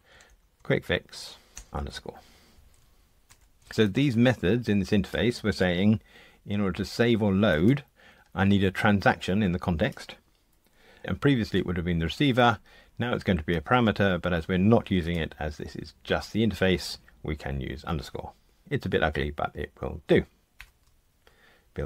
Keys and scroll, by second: 20.5 super+F9.